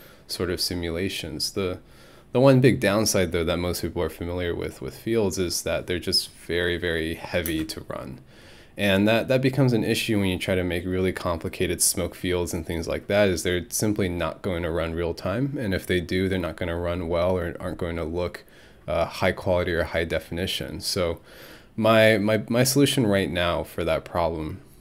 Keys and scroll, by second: 7.5 space.